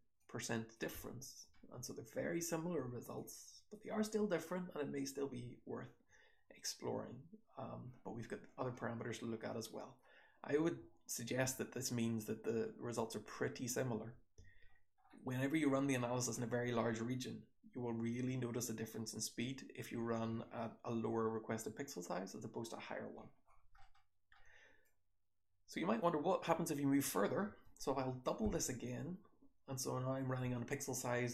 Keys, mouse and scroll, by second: 0.3-0.7 drag, 0.3-1.5 scroll down 1, 0.7-3.7 typing, 1.5-2.1 scroll up 2, 3.1-3.7 drag, 5.3 h, 6.0 h, 12.9 click, 13.2 h, 14.7-18.5 scroll down 1, 18.5-23.0 scroll down 1, 23.0-23.8 scroll down 1, 23.8 scroll down 1, 23.8-24.9 scroll up 1, 24.9-26.0 drag, 24.9-26.0 scroll up 1, 26.0-26.4 scroll up 1, 26.4 click.